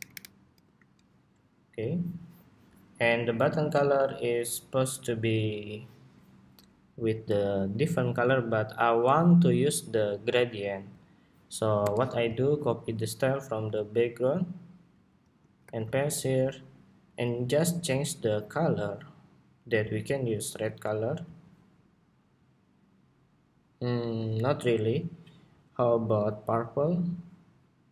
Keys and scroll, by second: 0.3 alt+shift+Left, 12.5 alt+super+c, 15.3 alt+super+v.